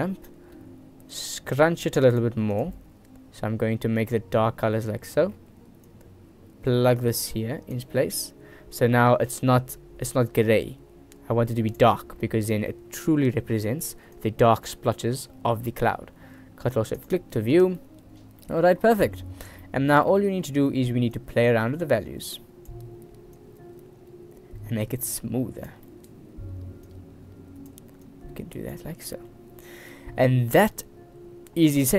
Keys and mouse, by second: 0.2 click, 1.3-2.4 drag, 12.7 middle click, 14.4 click, 15.1 middle click, 15.7 middle click, 18.1 middle click, 18.6 middle click, 19.2 middle click, 19.8 middle click, 20.3 middle click, 21.4 click, 23.6-25.9 drag, 26.2 middle click, 27.1 click, 28.3 click, 29.4 click, 29.4 right click, 29.9 ctrl+s.